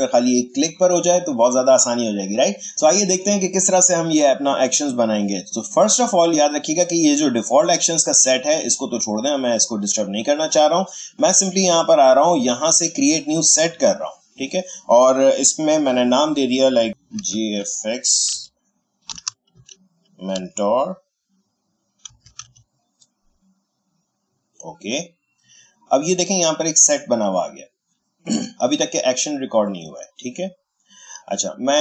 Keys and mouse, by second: 7.0 click, 13.6 click, 16.9 shift+g, 17.1 shift+f, 18.3-20.3 typing, 21.8-22.9 typing, 24.3 click, 31.5 click.